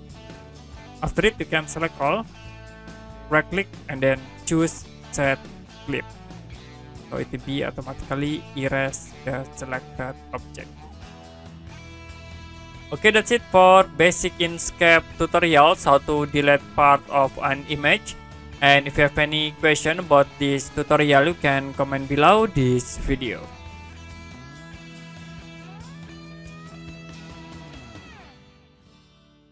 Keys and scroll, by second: 23.7 Print.